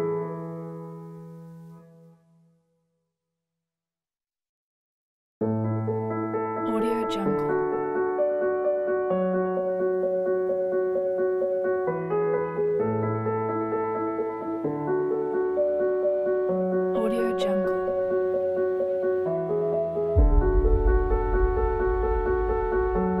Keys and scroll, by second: 7.6 space, 11.7 space, 19.2 Delete.